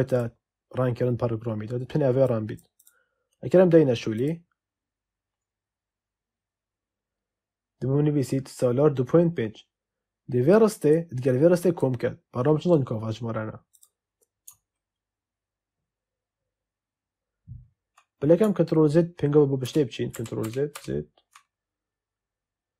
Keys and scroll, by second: 19.6 ctrl+z.